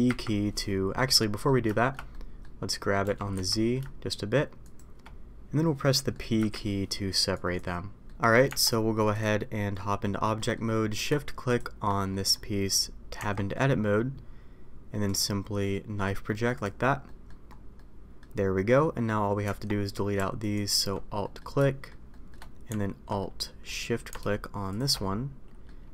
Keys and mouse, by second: 0.0 p, 1.1 middle click, 1.7 shift+middle click, 2.1 middle click, 3.0 g, 5.9 middle click, 8.0 middle click, 8.4 Tab, 9.1 click, 9.5 middle click, 10.3 middle click, 12.1 middle click, 13.1 Tab, 15.0-16.7 drag, 17.0 middle click, 17.7 middle click, 19.4 Tab, 21.2 middle click, 21.6 middle click, 22.1 middle click, 23.2 middle click, 23.6 middle click, 25.0-25.6 middle drag.